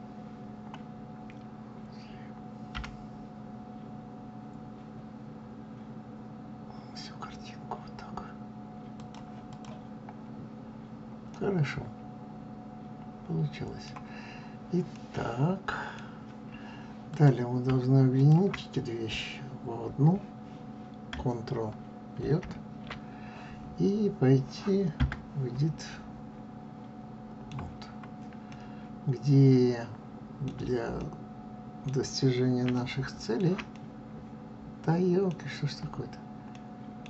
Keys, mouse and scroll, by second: 2.7 g, 9.4 click, 11.2-14.1 middle drag, 14.1 scroll up 2, 14.8-17.0 middle drag, 17.0 click, 18.1 shift+click, 25.7-27.8 middle drag, 27.8-28.3 scroll up 2, 28.4-35.3 middle drag, 35.3-36.4 scroll down 3, 36.4 middle click.